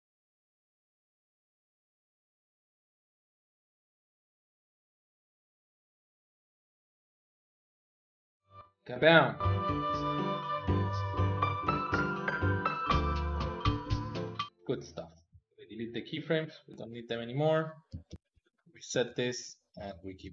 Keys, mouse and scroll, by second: 0.2-2.0 typing, 1.3 ctrl+middle click, 2.1 alt+z, 2.6 click, 2.9 middle click, 3.2 alt+z, 3.5 ctrl+KP_Add, 3.5 ctrl+KP_Add, 3.7 KP_3, 3.9 middle click, 4.2 ctrl+Tab, 4.5 middle click, 4.9 shift+k, 5.1 middle click, 5.3-6.5 drag, 6.5 middle click, 6.9 ctrl+Tab, 7.0 middle click, 7.3 click, 7.5 ctrl+Tab, 7.7 a, 8.0 ctrl+middle click, 8.1 click, 8.2 shift+click, 8.4 middle click, 9.2 click, 14.4 middle click, 15.2 a, 15.4 a, 16.0 a, 16.3 x, 18.0 alt+r, 18.2 alt+g, 18.6-20.3 ctrl+middle drag.